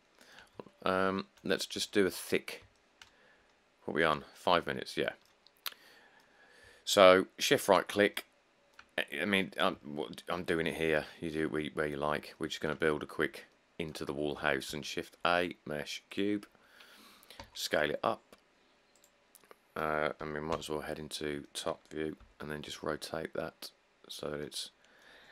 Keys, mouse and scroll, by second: 1.0 middle click, 1.0 middle click, 1.1 middle click, 1.6 middle click, 1.7 middle click, 1.7 middle click, 1.7 middle click, 1.8 middle click, 2.5 middle click, 2.6 middle click, 5.8 middle click, 8.0 shift+middle click, 9.3 middle click, 11.2 shift+middle click, 11.3 shift+middle click, 11.4 shift+middle click, 11.4 shift+middle click, 12.0 middle click, 12.1 middle click, 12.1 middle click, 12.2 middle click, 13.1 middle click, 13.1 middle click, 13.2 middle click, 14.9 a, 17.6 s, 20.7 7, 21.3 middle click, 22.4 r, 24.6 middle click.